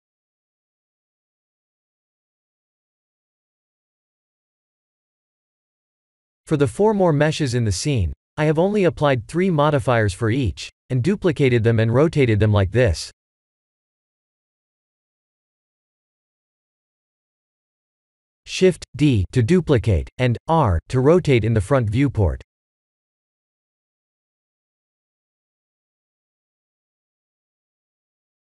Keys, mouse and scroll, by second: 0.5 click, 1.4 click, 2.9 click, 5.1 click, 8.1 click, 8.2-9.0 scroll up 6, 9.0 click, 11.3 click, 11.8 click, 12.7 click, 14.1 KP_1, 14.6 KP_7, 16.5 shift+d, 18.9 KP_1, 19.5 r, 25.2 middle click, 26.4 middle click, 26.7 middle click, 27.6 s.